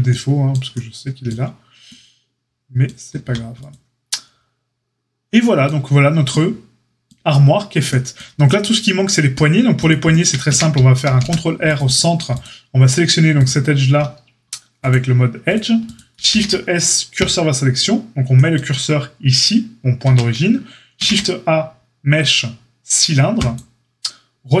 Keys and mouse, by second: 3.2 a, 9.7 click, 10.4 Tab, 11.0 ctrl+r, 14.8 click, 15.5-24.6 middle drag, 16.2 shift+s, 20.0 Tab, 20.9 shift+a.